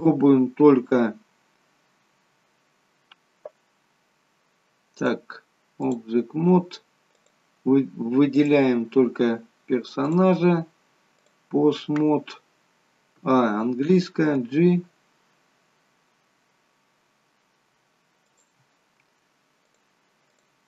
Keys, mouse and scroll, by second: 0.9 scroll up 3, 4.9 click, 7.1 click, 8.3 click, 10.0 click, 13.4 a, 14.3 g, 19.6 click.